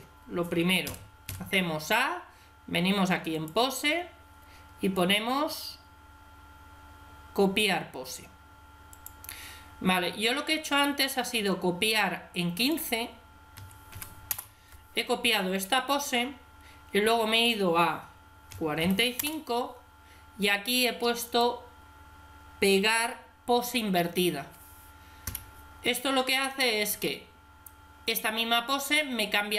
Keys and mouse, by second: 0.7 a, 1.1 a, 3.2 click, 4.3 click, 12.4-14.2 drag, 14.2 middle click, 17.2-18.9 drag, 21.1 click, 21.9-23.0 drag.